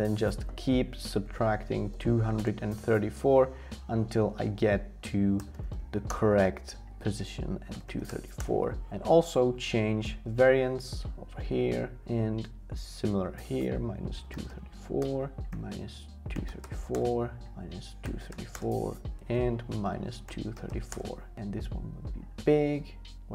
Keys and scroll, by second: 0.8-2.4 typing, 3.6 Tab, 4.3-6.2 typing, 7.1 Tab, 7.5-8.6 typing, 12.6 Tab, 13.4-15.0 typing.